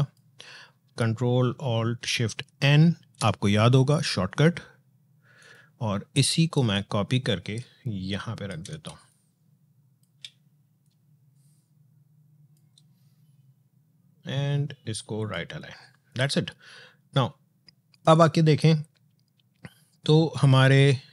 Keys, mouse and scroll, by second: 2.4 ctrl+alt+shift+n, 5.2-8.7 drag, 8.7 space, 8.9 click, 9.2 space, 10.6-14.9 drag, 15.0 click.